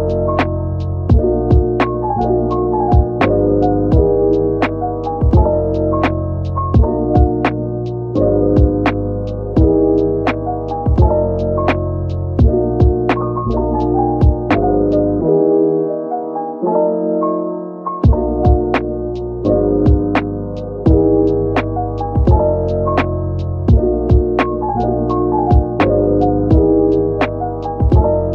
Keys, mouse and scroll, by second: 0.5 Tab, 0.8 middle click, 0.8 Tab, 1.6 middle click, 3.2 ctrl+z, 4.0 ctrl+z, 4.9 ctrl+z, 6.0 Tab, 6.5 scroll up 1, 7.4 middle click, 7.9 right click, 9.0 Tab, 9.5 middle click, 11.3-11.6 scroll down 1, 11.6 middle click, 13.3-13.6 scroll up 1, 13.6 middle click, 14.2 Tab, 14.5 scroll down 1, 15.3 Tab, 16.2 scroll down 1, 16.7 ctrl+b, 20.1-20.7 scroll up 1, 20.9-21.4 scroll down 1, 22.6-23.1 scroll up 1, 23.5 Tab, 24.0 middle click, 25.5-25.9 scroll up 1, 25.9 middle click.